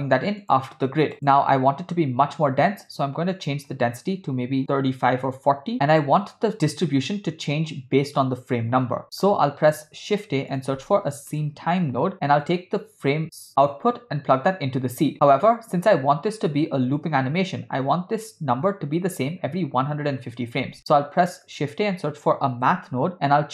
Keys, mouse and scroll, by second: 1.1 click, 3.3-5.7 drag, 6.0 click, 9.0 middle click, 9.6 shift+a, 13.7 click, 14.1-15.5 drag, 20.8 shift+a.